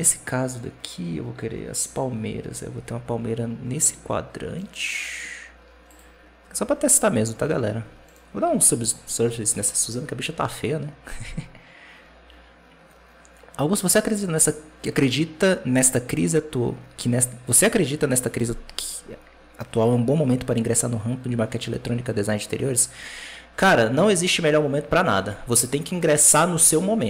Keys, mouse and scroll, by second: 4.4-5.7 right drag, 5.7 click, 6.8-7.9 scroll down 4, 7.9 right click, 8.6 ctrl+2, 9.4 w, 25.0 alt+a, 25.8-27.0 right drag.